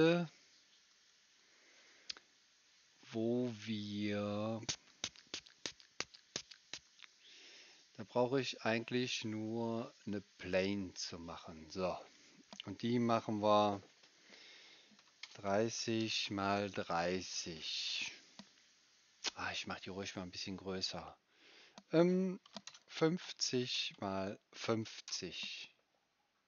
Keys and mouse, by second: 3.9 middle click, 4.1 middle click, 4.4 click, 4.4 right click, 5.2 middle click, 5.2 click, 5.2 right click, 5.4 middle click, 5.4 middle click, 5.5 click, 5.5 right click, 5.6-6.6 middle drag, 5.7 click, 5.7 right click, 5.8 click, 5.8 right click, 6.1 click, 6.1 right click, 6.3 click, 6.3 right click, 6.6-10.1 middle drag, 19.3-22.4 right drag, 22.4 KP_3, 23.2 Tab, 23.5 KP_3, 23.9 Tab, 25.1 KP_Enter.